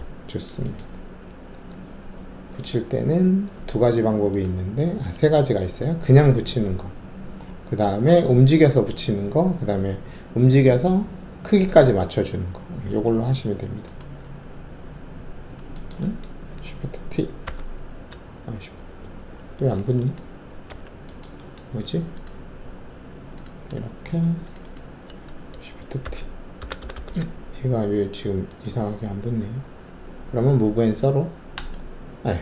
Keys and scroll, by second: 17.4 alt+shift+t, 20.7 alt+2, 26.0 shift+t, 26.7 shift+t, 26.9 shift+t.